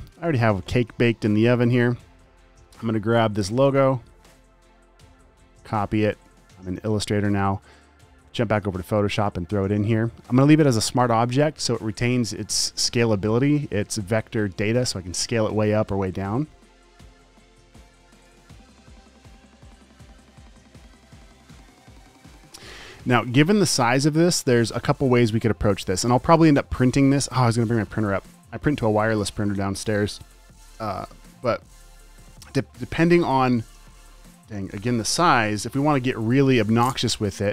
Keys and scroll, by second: 1.5-1.9 typing, 3.5 space, 5.8 super+c, 9.7 super+v, 20.5 e.